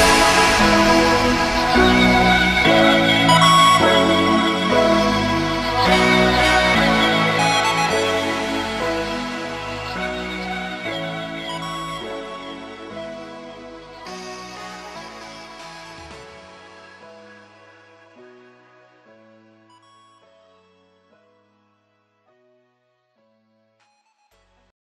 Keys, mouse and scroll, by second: 1.9 Left, 2.8 Up, 3.2 Left, 4.4 Up, 4.9 Left, 5.2 Up, 5.8 Down, 7.4 click, 9.3 click, 15.2 click, 19.2 Down, 22.8 click, 23.3 space, 23.5 click, 24.0 ctrl+-, 24.4 space, 24.5 click, 24.7 space.